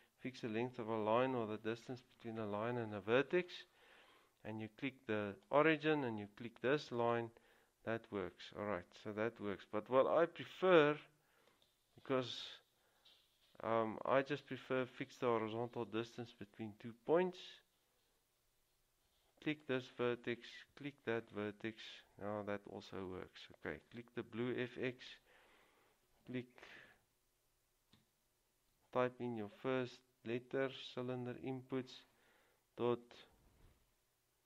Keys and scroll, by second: 28.7 typing.